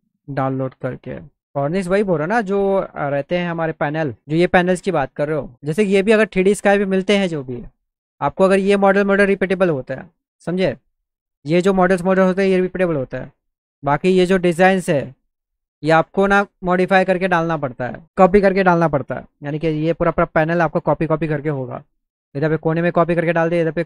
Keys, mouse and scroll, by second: 2.1-3.2 drag.